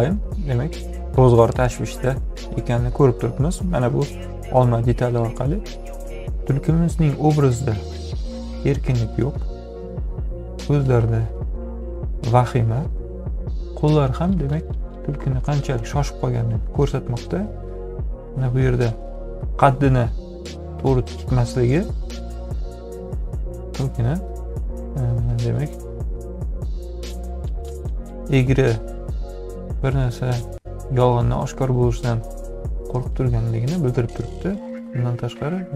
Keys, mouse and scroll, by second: 20.1-21.8 drag, 25.1-27.3 drag.